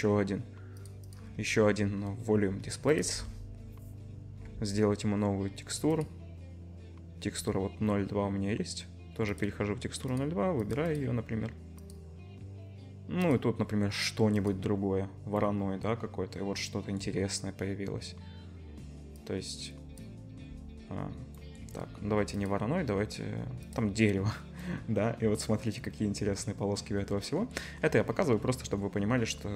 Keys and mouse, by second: 0.8 middle click, 1.1-9.4 drag, 9.4 middle click, 10.2 click, 10.8 middle click, 10.8 click, 11.0-13.3 middle drag, 13.3-29.5 drag.